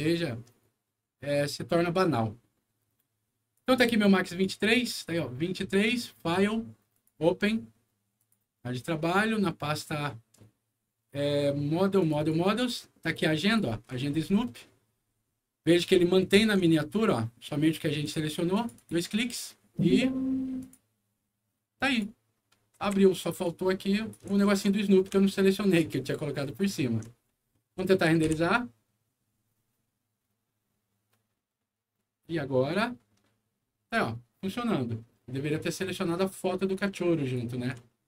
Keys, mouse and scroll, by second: 1.9 click, 3.5 click, 4.2 click, 5.9 click, 6.8 click, 8.1 click, 10.6 scroll down 1, 11.9 click, 12.1 click, 13.3 click, 14.0 ctrl+scroll up 1, 14.8-15.3 ctrl+scroll up 1, 15.7-16.3 ctrl+scroll up 2, 17.9 ctrl+click, 18.4 ctrl+click, 18.7 ctrl+click, 20.5 click, 21.7 click, 22.4 scroll up 2, 22.7 w, 23.3 click, 24.4 ctrl+z, 25.2-26.9 alt+middle drag, 27.1 scroll down 1, 27.4 alt+middle click, 28.2 F9, 36.7 click, 37.8-38.0 alt+middle drag.